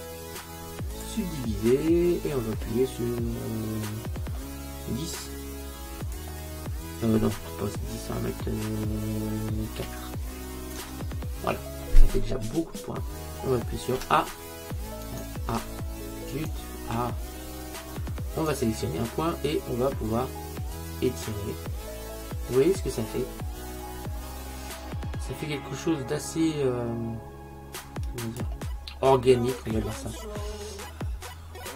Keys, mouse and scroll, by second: 6.1 click, 14.0 Tab, 15.6 Tab, 17.1 a, 18.5-20.3 right drag, 20.8 click, 29.1 middle click, 31.4 middle click.